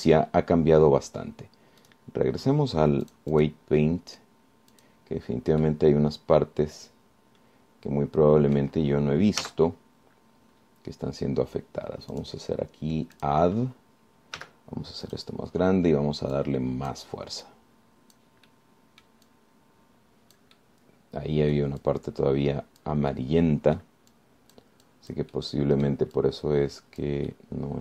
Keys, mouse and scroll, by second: 0.3-1.3 middle drag, 3.1 click, 4.3 click, 5.9 click, 6.9-10.0 middle drag, 10.6 z, 11.1-11.6 scroll up 1, 11.6-11.9 scroll down 1, 13.3 click, 14.4 click, 15.6 f, 16.3 click, 17.5 click, 18.7 click, 19.7 middle click, 21.8-22.9 middle drag, 23.1-24.2 drag, 24.3 middle click, 25.3 click, 26.1 click, 26.7 scroll down 1, 27.4-27.8 drag.